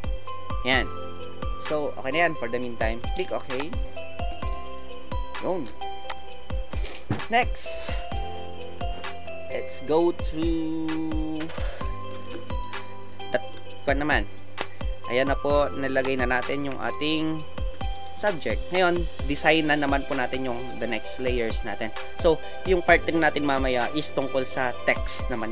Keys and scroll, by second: 16.9 Left, 17.1 Left, 17.8 Left.